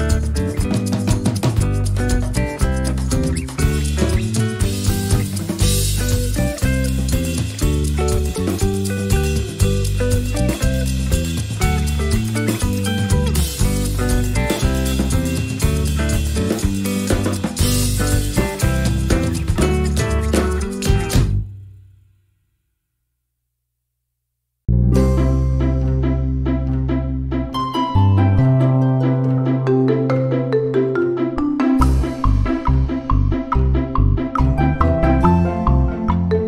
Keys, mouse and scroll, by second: 1.8 click, 2.4 click, 3.2 Right, 5.7 click, 6.3-9.1 drag, 7.4 space, 9.4 Delete, 10.5 click, 11.4-15.0 drag, 16.7 shift+click, 18.0 ctrl+d, 19.2 shift+click, 20.2 shift+click, 20.7-21.1 ctrl+shift+scroll up 2, 21.6 ctrl+click, 22.7 click, 23.3 click, 25.3 click, 26.0 click, 26.6 shift+click, 27.1-27.5 ctrl+shift+scroll down 2, 27.7 ctrl+click, 28.4 ctrl+shift+click, 29.7 shift+click, 30.4 shift+click, 31.3 shift+click, 32.3 click, 33.3 shift+click, 34.3 ctrl+shift+g, 35.4 ctrl+d, 36.0 click.